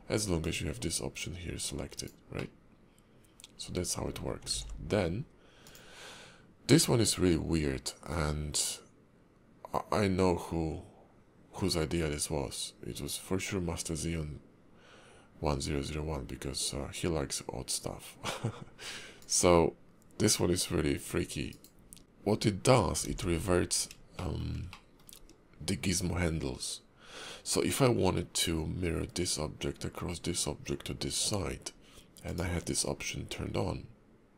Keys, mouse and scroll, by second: 0.4 click, 2.4 middle click, 4.5 alt+x, 5.6 click, 22.0 shift+middle click, 22.0-22.8 scroll up 2, 23.1 alt+x, 24.1 shift+middle click, 24.7 middle click, 25.9 scroll down 2, 32.2 click.